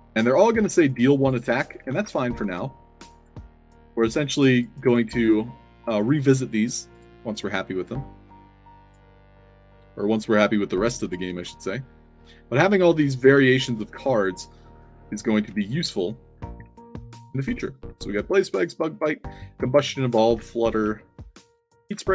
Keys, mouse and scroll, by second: 0.0-2.4 typing, 0.3 click, 3.1 click, 3.7 click, 4.4 click, 5.1 click, 5.8 click, 6.9 click, 7.7 click, 8.8 click, 9.5 click, 10.2 click, 10.9 click, 11.2 Tab, 12.7-13.8 typing, 14.6 scroll up 2, 15.5-18.5 typing, 19.7-20.8 typing, 21.9-22.1 typing.